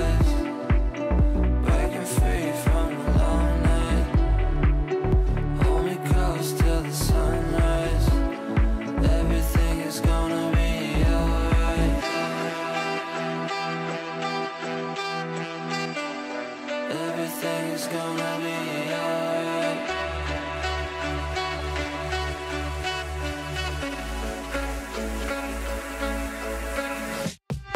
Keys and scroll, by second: 1.4 ctrl+v, 7.8 shift+Page_Down, 16.0 w, 27.6 w.